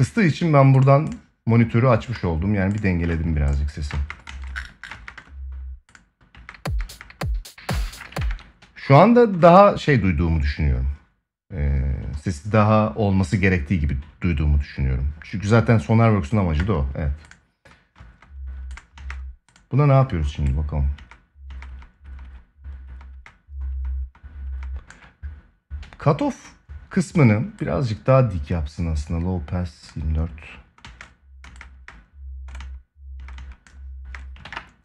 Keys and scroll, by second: 3.6 space, 7.9 ctrl+s, 17.7 space, 20.7 space, 30.5 space, 34.1 ctrl+s.